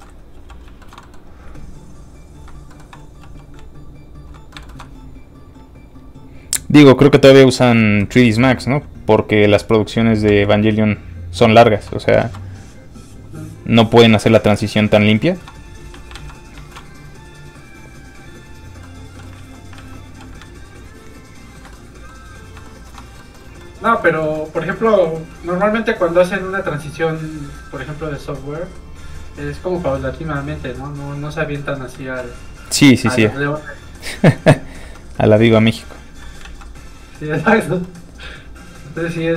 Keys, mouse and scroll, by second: 0.3 f, 0.8 shift+middle click, 1.4 middle click, 1.8 ctrl+click, 2.7 click, 3.2 f, 3.4 click, 3.7 ctrl+click, 4.5 shift+middle click, 5.8 shift+click, 6.2 click, 7.6 middle click, 8.1 shift+middle click, 8.7 middle click, 9.3 click, 10.3 f, 10.4 click, 12.2 ctrl+z, 13.1 z, 13.8 f, 13.9 click, 14.1 shift+middle click, 14.8 scroll up 1, 14.8 z, 15.1 middle click, 16.1 alt+shift+z, 16.9 shift+middle click, 17.5 click, 18.8 middle click, 19.3 alt+z, 20.4 ctrl+z, 20.5 ctrl+click, 21.7 click, 21.8 middle click, 22.6 shift+middle click, 23.6 middle click, 23.7 middle click, 26.0 click, 30.3 shift+f, 30.5 click, 32.0 ctrl+z, 32.9 z, 33.0 click, 34.8 f, 35.0 click, 36.4 ctrl+z, 36.9 z, 37.0 click, 37.8 middle click.